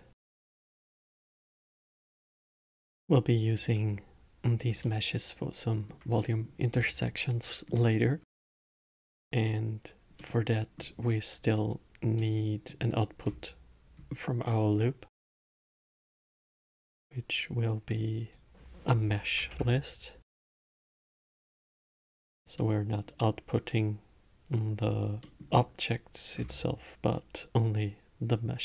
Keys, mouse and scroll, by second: 1.0-1.9 scroll up 5, 1.9-2.4 scroll down 2, 2.4-2.8 alt+middle drag, 3.2-10.2 middle drag, 10.5-13.6 middle drag, 13.6-14.2 scroll up 2, 16.1-18.5 scroll up 3, 18.5-21.6 drag, 22.9-24.0 middle drag, 24.0-25.6 drag, 25.6-26.7 middle drag, 26.7-28.6 scroll up 7.